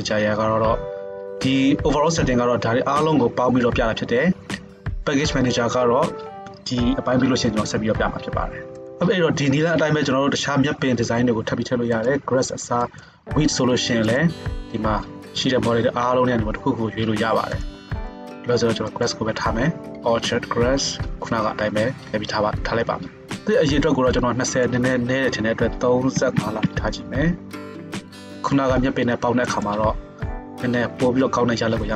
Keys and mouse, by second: 17.7 middle click, 18.0-29.7 drag, 29.7-31.9 middle drag.